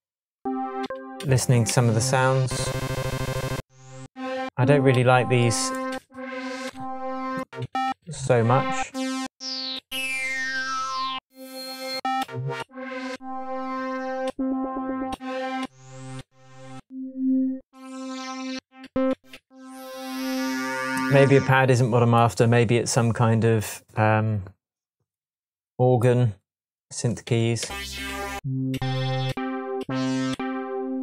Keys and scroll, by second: 0.8 Down, 1.7 Down, 4.0 Down, 4.9 Down, 6.6 Up, 7.6 Down, 9.2 Down, 9.7 Down, 12.2 Up, 14.2 Up, 15.6 Up, 18.5 Down, 27.2 Right, 27.6 Down, 30.3 Up.